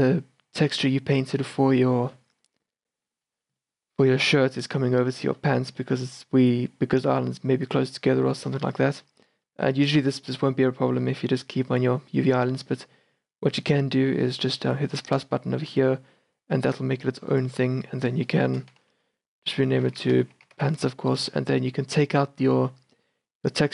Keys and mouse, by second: 3.4 middle click, 10.7 click, 15.2-20.0 drag, 22.1 click, 22.4-23.7 middle drag.